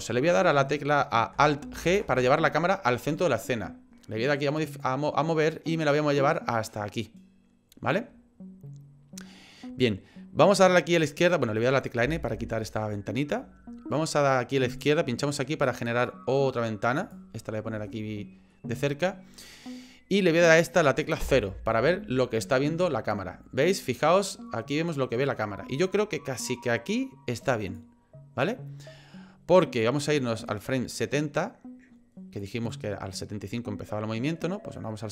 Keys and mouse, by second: 1.8 alt+g, 4.6 click, 6.2-7.9 drag, 12.0 n, 14.9-17.2 drag, 17.9 shift+middle click, 21.2 KP_0, 24.0-27.8 drag, 30.5-32.4 drag, 32.7-35.1 drag.